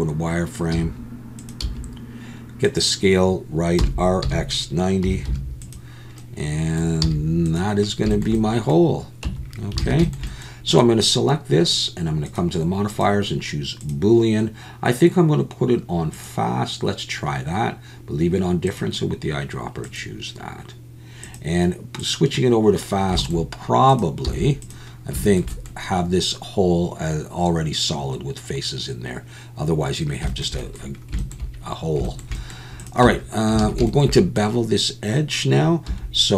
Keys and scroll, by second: 0.7 g, 1.6 s, 4.2 r, 4.2 x, 5.0 9, 5.2 0, 7.0 z, 9.2 Tab, 9.8 alt+a, 24.2 x, 33.0 Tab, 33.6 alt+a, 35.9 2.